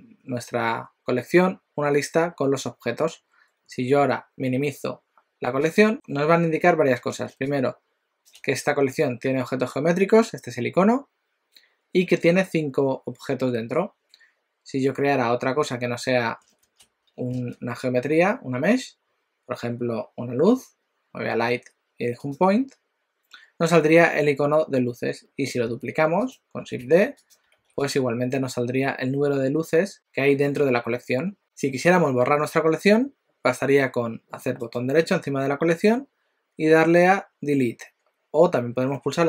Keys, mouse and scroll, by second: 5.6 click, 17.4 shift+a, 25.7 g, 26.9 shift+d, 27.6 shift+d, 34.6 right click.